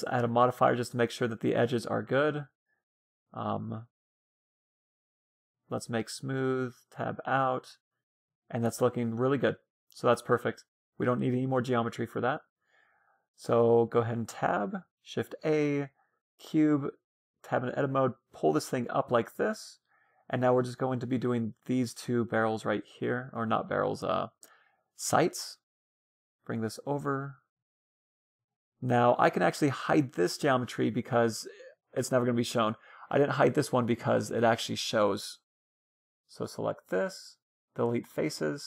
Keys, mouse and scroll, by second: 3.4 Tab, 3.8 a, 4.4 a, 5.1-7.7 drag, 6.1 Tab, 6.6 Tab, 7.0-12.5 middle drag, 13.2 middle click, 13.8-15.5 scroll up 1, 14.2 shift+a, 15.5 middle click, 16.1 Tab, 16.7 s, 18.0 g, 18.9-22.0 middle drag, 20.3 s, 21.5 g, 22.8 a, 23.1 b, 24.1-26.0 drag, 24.9 a, 25.1 c, 26.5-30.6 drag, 30.6-32.1 middle drag, 33.6 middle click, 35.1 a, 35.4 b, 36.0 middle click, 36.6 Delete, 37.8 a.